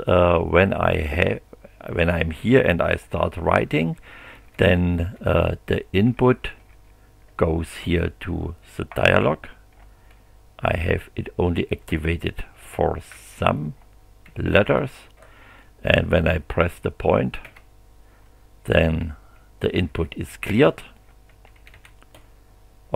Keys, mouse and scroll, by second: 3.4 a, 6.1 s, 10.8 b, 13.1 c, 14.2 3, 17.4 ., 19.9 a, 21.3 2.